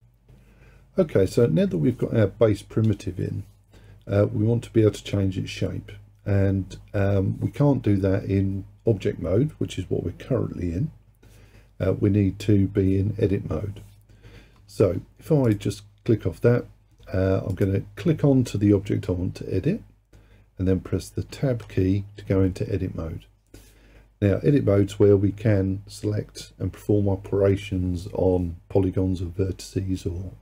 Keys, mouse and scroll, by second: 15.5 click, 17.6 click, 21.4 Tab.